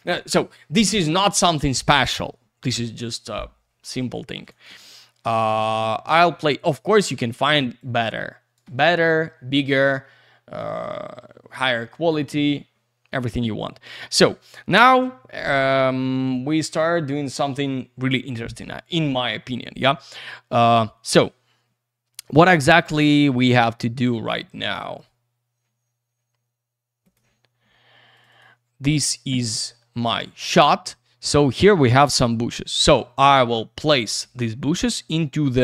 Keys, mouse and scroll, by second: 4.1 alt+middle click, 4.4 alt+z, 4.5 click, 4.6 double click, 4.7 alt+shift+q, 5.5 alt+z, 5.6 click, 5.9 middle click, 7.8 click, 8.9 alt+middle click, 10.6 click, 11.7 alt+middle click, 12.2 c, 24.0 click, 27.3 click, 28.1 click, 28.3 click, 28.4 double click, 29.9 click.